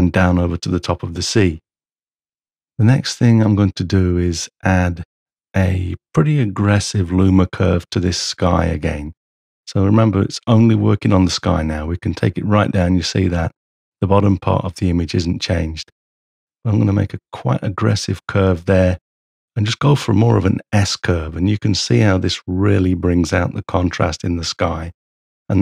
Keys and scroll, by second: 1.9 m.